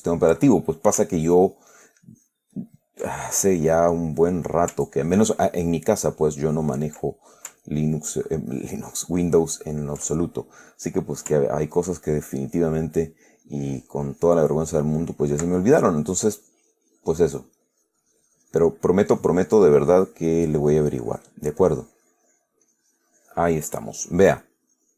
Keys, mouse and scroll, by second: 0.0 ctrl+click, 0.8 ctrl+middle click, 1.5-2.8 ctrl+drag, 2.8 ctrl+click, 3.7 ctrl+click, 3.8-5.0 middle drag, 5.3 ctrl+click, 6.4 ctrl+click, 7.4 ctrl+middle click, 8.0 ctrl+click, 9.2-10.4 ctrl+drag, 10.5 ctrl+middle click, 11.2 click, 12.1-13.2 ctrl+drag, 13.7-15.3 ctrl+drag, 15.5-19.0 ctrl+drag, 19.4-21.7 drag, 21.9-22.9 drag, 24.7 click.